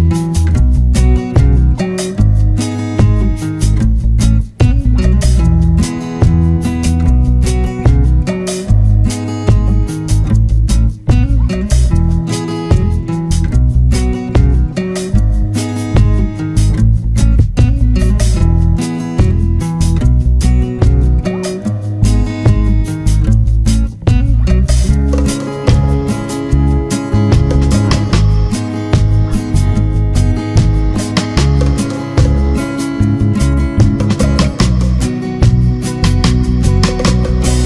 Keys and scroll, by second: 12.4 ctrl+-, 12.8 ctrl+=, 25.3 ctrl+-, 26.7 ctrl+space.